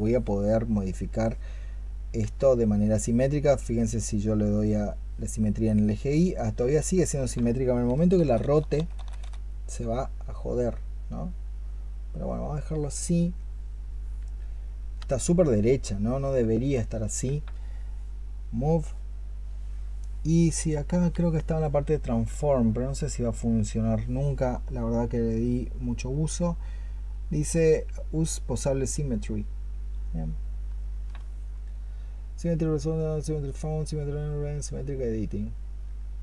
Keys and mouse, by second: 2.1 x, 7.8-9.1 typing.